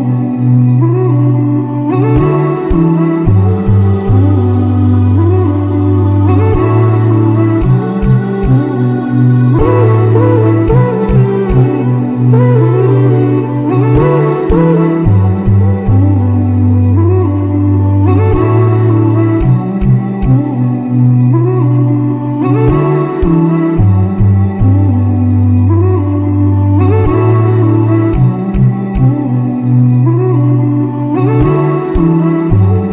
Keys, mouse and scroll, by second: 4.0 click, 4.4 click, 5.2-5.7 drag, 6.4-9.4 drag, 13.1-17.0 drag, 17.0-17.6 scroll down 1, 17.6-18.0 drag, 18.0-18.9 scroll down 1, 18.9-23.8 drag, 27.0-28.1 scroll down 1, 28.1-30.2 scroll up 1, 31.9 click.